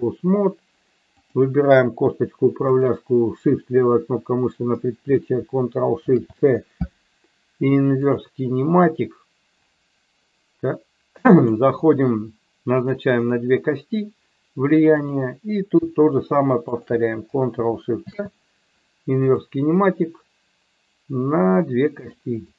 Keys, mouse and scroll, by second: 1.2 click, 2.7 shift+click, 6.1 ctrl+shift+c, 11.3 click, 12.7 click, 14.9 click, 16.7 shift+click, 18.0 ctrl+shift+c, 21.9 click, 22.4 click.